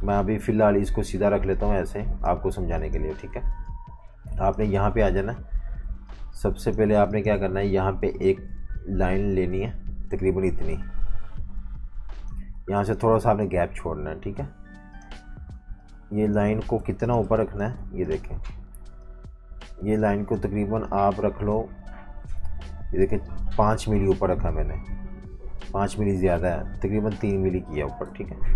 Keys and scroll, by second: 2.6-7.5 typing, 12.6 v, 16.8 super+y, 17.0-18.4 typing, 27.8 typing, 28.1 super+-, 28.2 super+-.